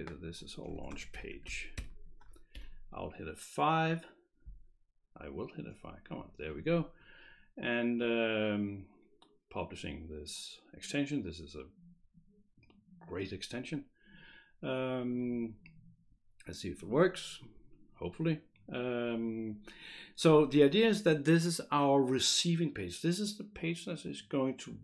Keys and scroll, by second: 0.8-2.3 typing, 2.5 F5.